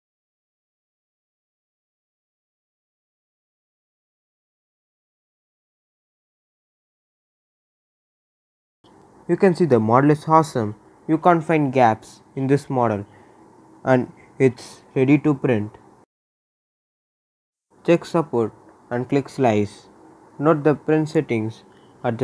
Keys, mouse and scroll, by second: 8.9 scroll up 1, 9.2-10.6 right drag, 10.6 scroll up 1, 10.9-16.9 right drag, 16.9 click, 18.4-18.9 scroll down 2, 19.2-20.4 right drag, 20.4-20.8 scroll up 1.